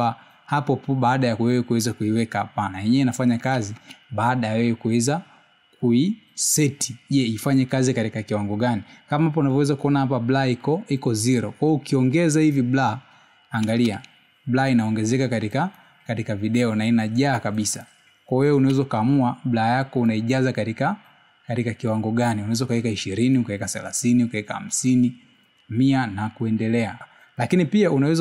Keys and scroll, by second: 1.3 space, 6.6 space, 16.9 space, 21.8 space, 26.7 space.